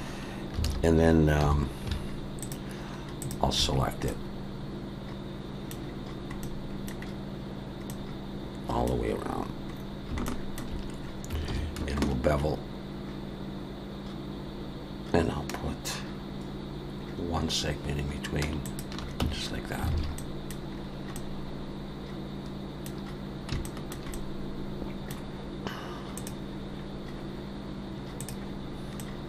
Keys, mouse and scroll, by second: 0.6 alt+a, 1.4 2, 2.4 alt+shift+click, 3.7-4.1 scroll down 2, 4.1 middle click, 5.8 scroll down 3, 6.3 scroll up 1, 6.4 middle click, 7.0-7.9 scroll down 2, 7.9 middle click, 9.2-10.1 scroll up 6, 10.3 shift+middle click, 11.5 ctrl+b, 19.2 Tab, 19.4-19.9 scroll down 3, 19.9 alt+a, 20.2 middle click, 20.7-21.2 scroll down 3, 21.2 middle click, 23.0 scroll up 1, 23.2 scroll down 2, 23.4 scroll up 1, 23.6 shift+middle click, 24.1 middle click, 29.0 middle click.